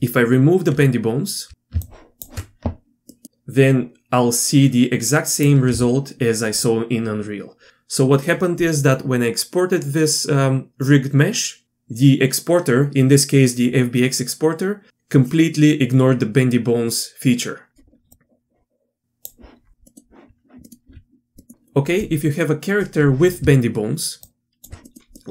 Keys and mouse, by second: 1.9 alt+click, 3.1 middle click, 3.2-5.4 drag, 5.7 z, 6.6-7.7 drag, 18.1-19.3 drag, 19.9 middle click, 20.6 middle click, 20.9 z, 21.4-23.4 middle drag, 24.2 alt+click, 25.2 middle click.